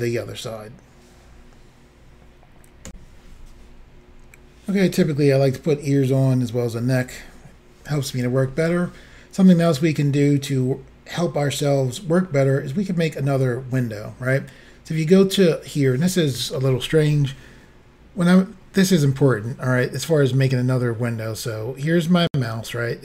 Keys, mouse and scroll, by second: 2.9 Insert.